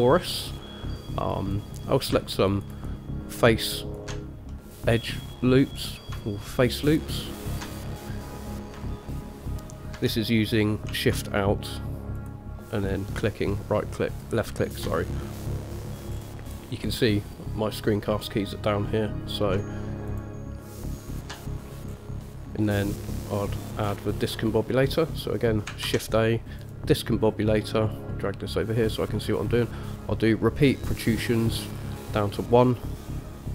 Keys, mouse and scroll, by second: 0.6-1.2 scroll down 2, 1.5 click, 2.7 alt+shift+click, 2.9 alt+shift+click, 4.0 alt+shift+click, 4.7 middle click, 6.0-6.3 scroll up 1, 7.1 alt+shift+click, 8.1 middle click, 12.4 alt+shift+click, 14.9 alt+shift+click, 15.4 middle click, 16.3 scroll up 2, 20.3 alt+shift+click, 21.3 alt+shift+click, 22.1 scroll down 1, 22.4 middle click, 24.2 shift+middle click, 26.0 shift+a.